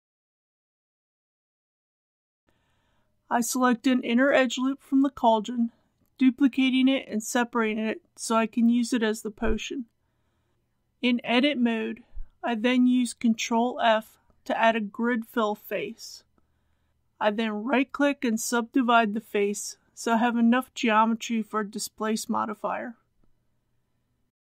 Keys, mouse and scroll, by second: 3.6 alt+click, 5.4 shift+d, 6.6 p, 7.3 click, 8.0 Tab, 8.4 click, 10.2-11.0 typing, 11.3 Return, 12.7 Tab, 13.1 typing, 15.1 ctrl+f, 16.1 click, 17.0 right click, 17.8 click.